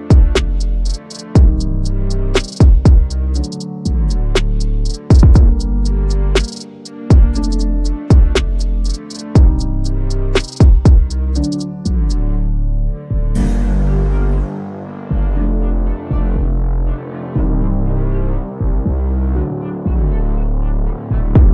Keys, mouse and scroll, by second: 0.3 right click, 1.0 click, 2.1-3.9 typing, 4.9 click, 8.5 click, 19.8-20.7 drag.